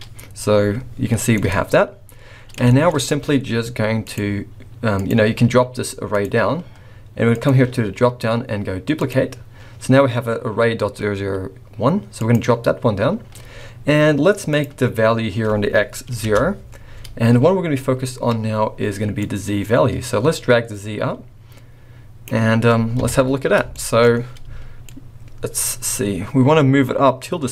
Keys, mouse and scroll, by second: 1.3 middle click, 2.6 shift+middle click, 2.9 scroll up 2, 4.0 click, 5.0 click, 6.1 click, 7.2 click, 12.1 click, 14.5 click, 19.2 click, 23.0 KP_1, 23.7 shift+middle click, 24.0-24.4 scroll up 3, 24.8 shift+click.